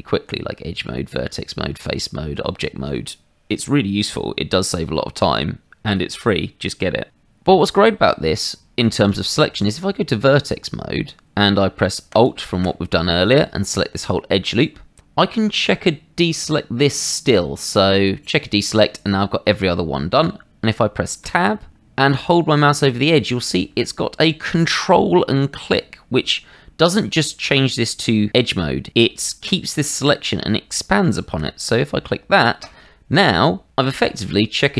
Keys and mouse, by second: 0.2 Tab, 1.2 Tab, 1.9 Tab, 9.0 Tab, 12.1 alt+click, 16.4 click, 18.2 click, 21.2 Tab, 32.6 ctrl+click, 33.7 middle click.